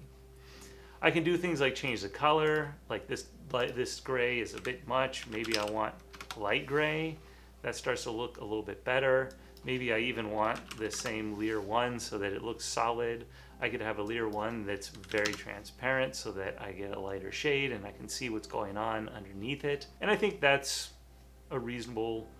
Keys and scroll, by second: 4.7 Left, 5.0-6.1 typing, 6.3 Return, 10.4-11.4 typing, 14.1-15.1 typing.